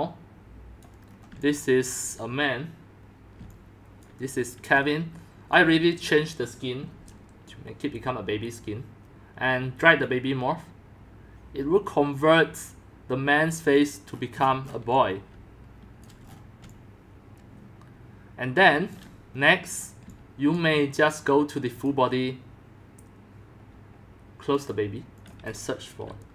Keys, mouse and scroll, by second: 1.1-2.8 middle drag, 1.4 c, 2.0 c, 2.1 c, 2.3 c, 3.3 c, 4.0 c, 4.1 c, 4.2 right click, 5.3 typing, 5.9-10.6 drag, 13.7 click, 14.1-16.1 scroll down 17, 14.6-20.0 typing, 16.1-16.6 scroll, 16.3 middle click, 17.2 middle click, 19.3-20.6 middle drag, 19.5-20.0 scroll, 20.6-23.1 drag, 25.2 click, 26.1-26.3 typing.